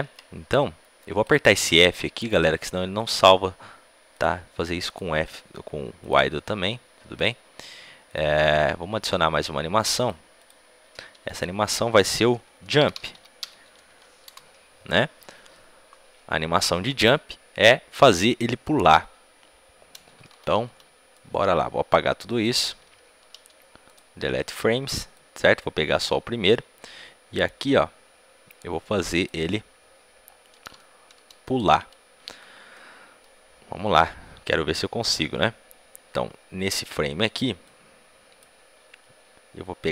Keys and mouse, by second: 10.3-14.1 drag, 23.8 b, 23.8 x, 25.1-26.7 drag, 30.1-37.4 middle drag, 37.4-39.5 drag, 39.5-39.9 middle drag.